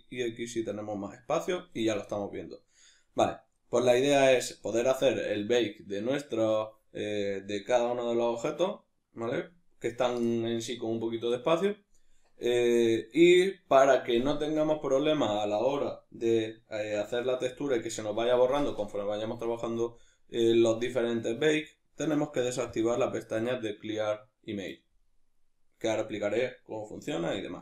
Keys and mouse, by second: 0.0-22.7 middle drag, 17.3 a, 22.7 click.